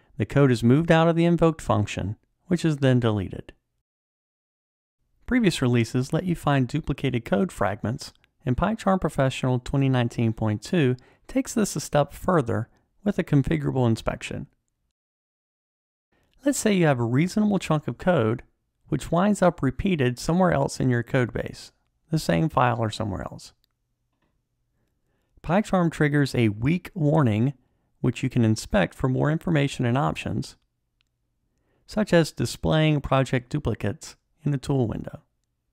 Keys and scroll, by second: 16.1 alt+Up, 19.0 super+d, 22.6 alt+super+l.